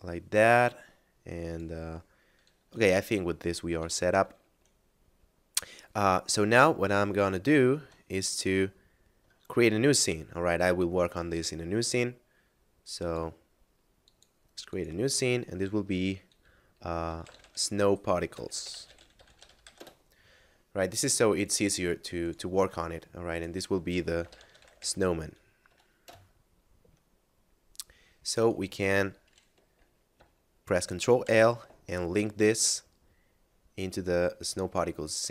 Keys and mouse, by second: 3.7 Tab, 6.1 middle click, 7.4 shift+middle click, 8.8 shift+middle click, 12.9 click, 17.0 s, 17.2 n, 17.3 o, 17.4 w, 18.6 p, 18.7 a, 18.9 r, 19.0 t, 19.8 Return, 21.4 click, 23.9-24.6 typing, 26.0 Return, 28.2 right click.